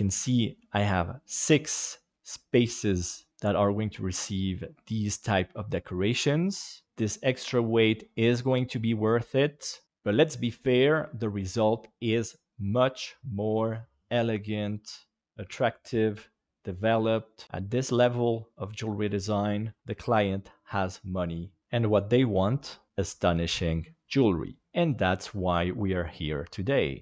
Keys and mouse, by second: 1.7 middle click, 3.3-4.5 middle drag.